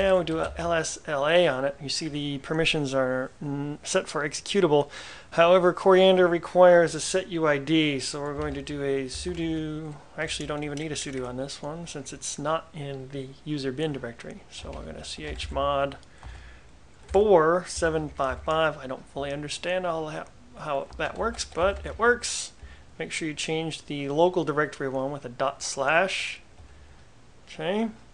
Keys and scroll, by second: 0.0-1.0 typing, 8.3-11.0 typing, 14.4-16.0 typing, 17.2-18.9 typing, 21.1-22.4 typing, 26.7 Return.